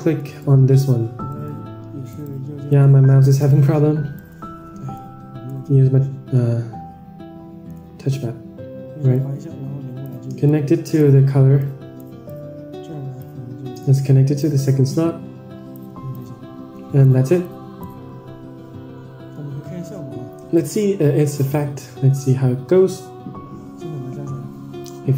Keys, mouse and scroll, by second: 0.3 shift+right click, 0.6 shift+right click, 2.0-2.5 shift+right drag, 3.7 shift+right click, 6.3-7.6 shift+right drag, 9.0-10.1 drag, 10.3 click, 11.5 click, 12.2-13.1 drag, 13.7-14.3 drag, 14.8-15.6 drag, 16.0-16.9 drag, 17.3 click, 19.1 Tab, 20.8 click, 21.6 middle click.